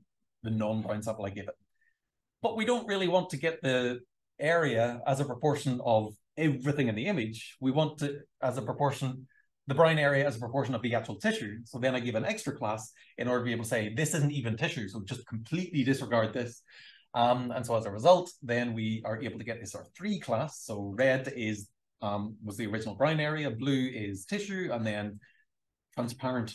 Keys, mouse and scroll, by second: 1.2 click, 1.7 click, 2.7 shift+scroll down 2, 2.9 shift+scroll, 3.1-4.7 shift+scroll down 4, 5.5 shift+scroll up 1, 6.2 super+scroll up 1, 6.7 scroll down 2, 7.7-8.1 scroll up 2, 8.8 r, 9.5-10.8 drag, 12.8-15.8 drag.